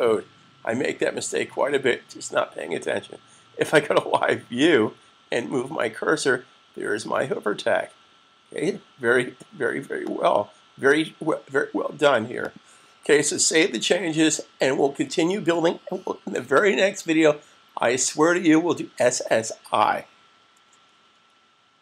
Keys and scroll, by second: 13.6 super+s.